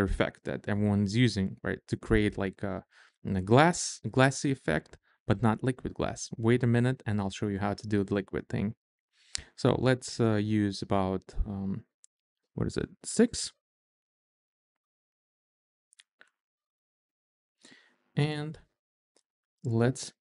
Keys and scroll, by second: 12.3 Up, 13.0 Down, 14.1 Up.